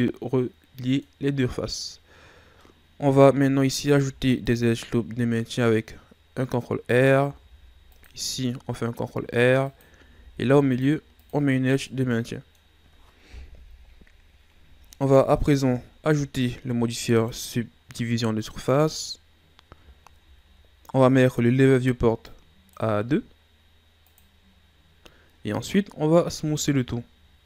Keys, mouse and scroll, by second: 1.8-2.6 scroll up 1, 2.6-4.0 middle drag, 4.0 ctrl+r, 10.1 ctrl+r, 11.6 scroll down 3, 11.9-13.6 middle drag, 13.6 KP_1, 14.7 Tab, 15.3-15.8 scroll down 3, 15.8 shift+scroll up 2, 18.9-19.9 drag, 19.9-22.3 shift+scroll down 3, 22.3-25.0 drag, 25.0-26.3 scroll up 3, 26.3 w.